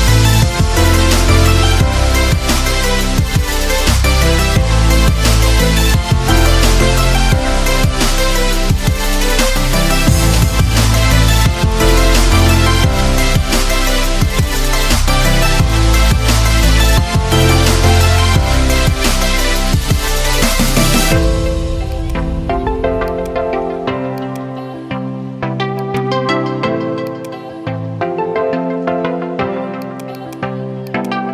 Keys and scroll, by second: 7.5 Delete, 9.1 Delete.